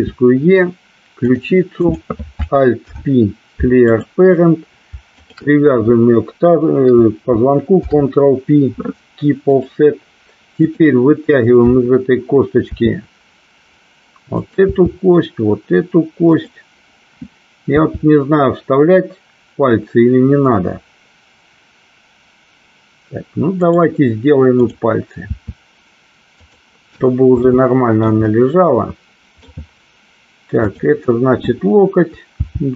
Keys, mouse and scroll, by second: 0.0 e, 1.9 click, 2.9 alt+p, 7.7 ctrl+p, 10.8 click, 12.8 e, 14.4 click, 14.8 e, 16.4 click, 17.8 e, 23.6 click, 24.6 click, 25.4 e, 26.5 click, 27.6 middle click, 28.5-29.6 middle drag, 30.7 click, 32.4 g.